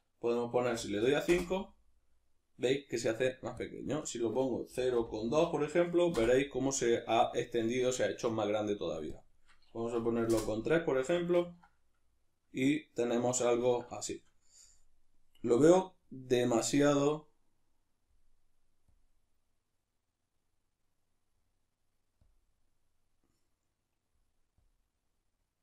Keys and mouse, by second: 1.4 Return, 6.2 Return, 10.3 Return, 11.3-17.1 ctrl+middle drag, 17.1-25.6 drag.